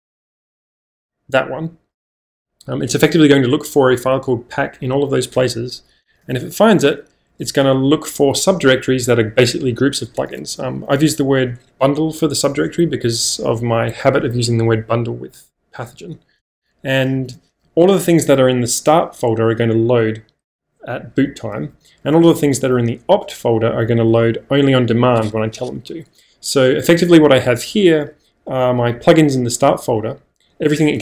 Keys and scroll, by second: 0.0-0.3 typing, 6.2 space, 7.3 j, 10.9 k, 16.9-19.3 typing, 21.3-22.2 typing.